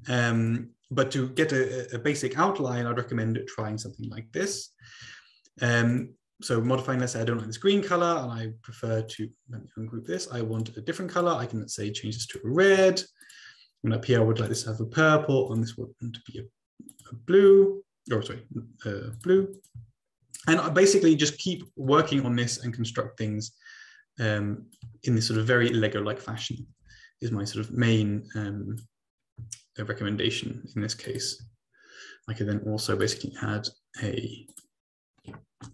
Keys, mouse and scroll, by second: 0.4 shift+click, 0.9 click, 5.9 click, 6.6 click, 7.2 click, 9.1 middle click, 9.2 right click, 10.1 click, 10.7 click, 11.1 click, 12.3 shift+click, 13.2 click, 14.6 shift+click, 15.5 click, 16.9 shift+click, 19.1 shift+click, 19.5 ctrl+click, 20.0-21.0 scroll down 1, 21.5 click, 22.0 ctrl+c, 22.1 ctrl+v, 22.7-24.8 ctrl+drag, 25.5-25.9 ctrl+scroll up 2, 26.7 click, 27.0 ctrl+c, 27.1 ctrl+v, 27.7-29.2 drag, 31.6 click, 33.1 click, 34.5 click.